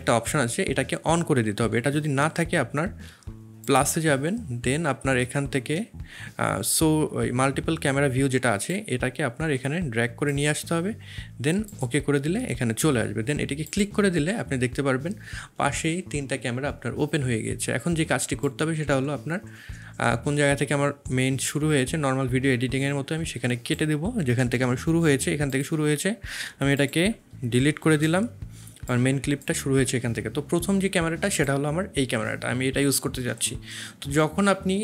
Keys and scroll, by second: 24.7 c, 26.4 v, 27.8 shift+x.